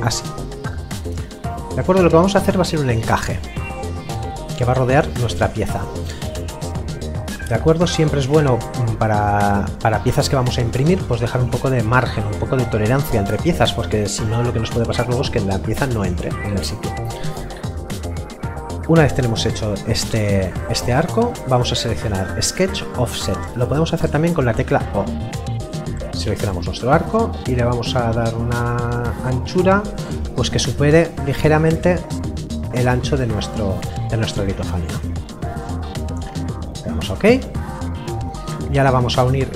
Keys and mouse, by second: 21.7 click, 25.4 click, 37.1 click.